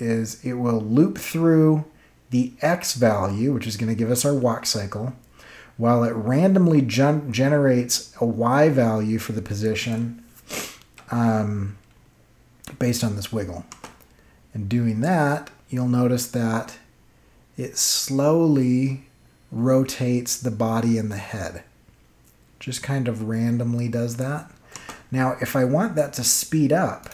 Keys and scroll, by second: 13.6 space, 24.7 space.